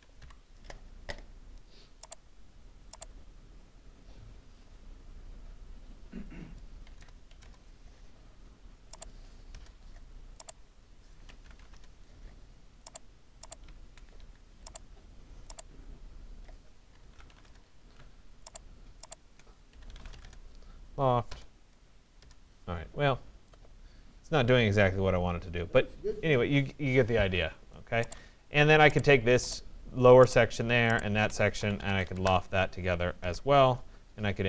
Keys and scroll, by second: 0.2 Delete, 6.4 5, 7.0 0, 7.4 Return, 14.2 Escape, 17.4 Return, 31.8 Return.